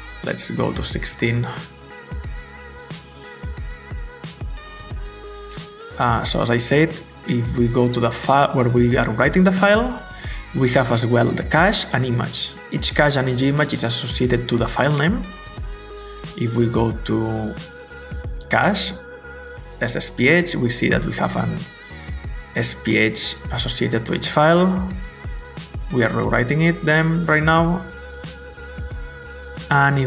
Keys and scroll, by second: 0.1-1.8 typing, 3.9-6.3 typing.